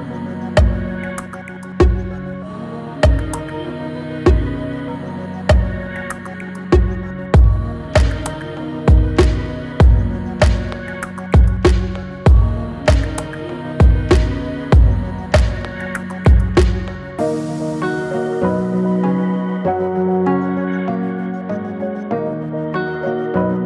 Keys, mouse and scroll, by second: 0.9-10.5 drag, 10.6-12.9 shift+drag, 12.9-15.4 drag, 18.1-22.2 drag, 22.2-23.6 drag.